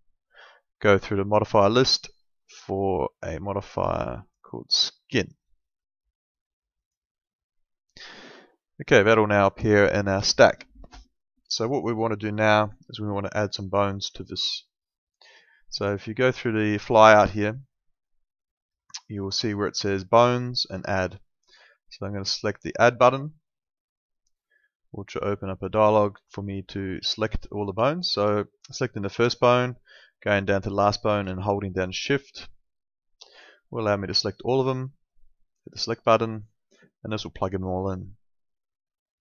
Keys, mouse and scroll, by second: 6.8 click, 8.5 alt+middle click, 14.7 click, 23.0 click, 32.0 shift+click, 35.1 click.